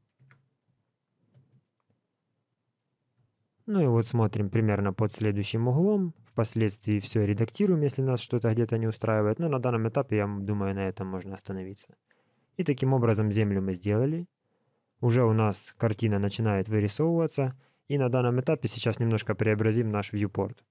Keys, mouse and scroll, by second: 0.2 Tab, 1.5 alt+a, 1.6 middle click, 3.0 scroll up 2, 3.3 shift+middle click, 4.4-4.7 scroll down 1, 4.7 middle click, 9.9 middle click, 12.0 shift+middle click, 13.6-14.6 scroll up 2, 14.6-15.0 scroll down 1, 15.2 shift+middle click.